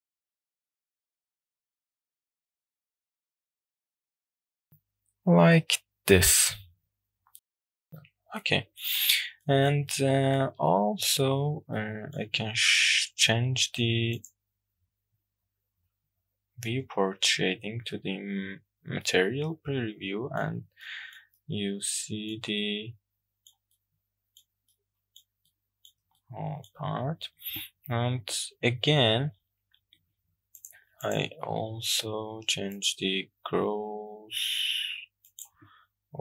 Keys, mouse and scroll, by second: 1.1-2.2 middle drag, 3.1 click, 4.4-6.7 drag, 6.9-7.9 middle drag, 7.9 click, 7.9-8.4 scroll up 3, 8.4-8.9 middle drag, 9.1-9.5 scroll down 1, 9.5 shift+middle click, 9.9 middle click, 10.7-11.3 shift+middle drag, 11.9 shift+middle click, 16.3 click, 19.1-20.4 middle drag, 20.9 shift+middle click, 21.4-22.4 middle drag, 22.6-23.6 shift+middle drag, 23.8-24.5 middle drag, 24.7-25.2 shift+middle drag, 25.5 middle click, 26.2-26.7 shift+middle drag, 30.6 click, 31.1 click, 32.7-35.5 drag.